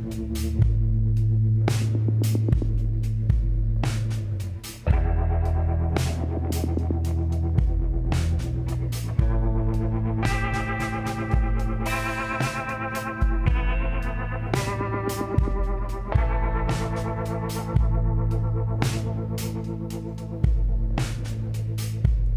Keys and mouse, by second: 1.1 s, 4.2-5.6 drag, 7.0-8.9 drag, 8.9-10.7 middle drag, 10.7-12.6 drag, 12.6 middle click, 12.8-14.5 drag, 14.5 s, 16.5 s, 18.9-21.9 drag.